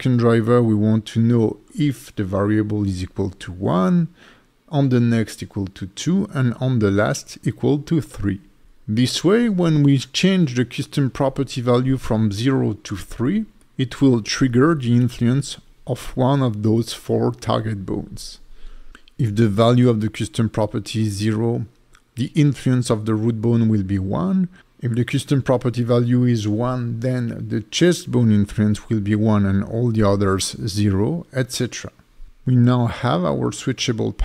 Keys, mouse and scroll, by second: 1.8 right click, 5.4 right click, 10.0 click, 13.2-14.1 scroll down 5, 14.7 click, 15.1-17.4 scroll down 4, 17.4 alt+shift+right click, 17.4 scroll down 1, 18.1-19.0 scroll down 5, 19.4 click, 21.0-22.0 scroll down 8, 23.9 click, 24.7 click, 25.0 click, 25.3 r, 25.4 r, 26.1 right click, 26.4 click, 26.9-27.6 scroll down 4, 28.5 click, 29.8 click, 30.1 g, 30.6 right click, 31.0 click, 31.5-32.4 scroll down 4, 32.4 click, 33.1 click, 33.5 g, 34.1 right click.